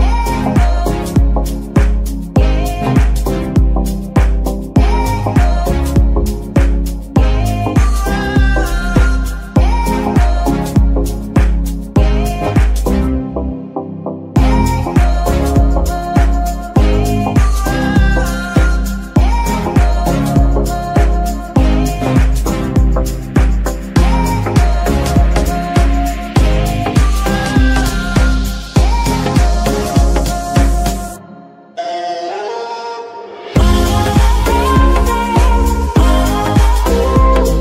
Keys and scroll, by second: 0.6 g, 3.9 KP_3, 4.3 g, 5.9 g, 8.7 KP_1, 9.7 shift+g, 11.6 g, 12.8 shift+n, 15.1 shift+n, 17.3 r, 18.2 g, 18.8 r, 19.1 g, 21.2 z, 22.8 KP_3, 23.3 g, 25.4 g, 25.5 y, 27.0 F2, 27.6-28.0 typing, 31.0 shift+., 31.1 l, 31.8 Left, 31.9 Left, 32.2 BackSpace, 32.4 Return, 33.6 F2, 34.2 BackSpace, 34.3 BackSpace, 34.5 BackSpace, 34.7 Return.